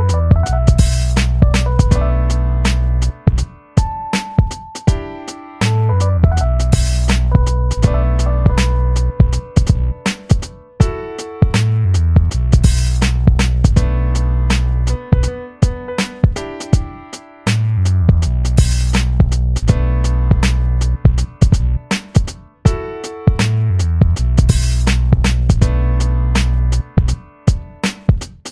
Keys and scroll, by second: 16.9 ctrl+=, 16.9 ctrl+-, 16.9 u, 17.4 ctrl+=, 25.4 v, 27.7 ctrl+d.